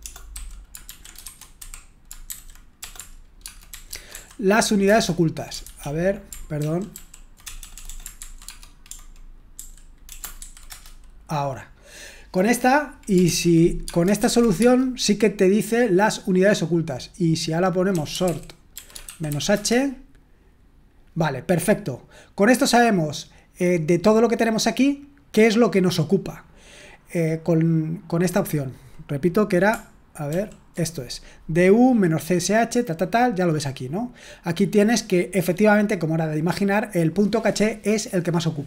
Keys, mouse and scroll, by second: 0.0-6.2 typing, 6.9 ctrl+p, 7.4-11.0 typing, 13.2 ctrl+p, 13.8 space, 14.1 |, 14.5 space, 17.6-19.7 typing, 28.5-29.6 drag, 30.3 ctrl+p, 35.4-38.6 drag.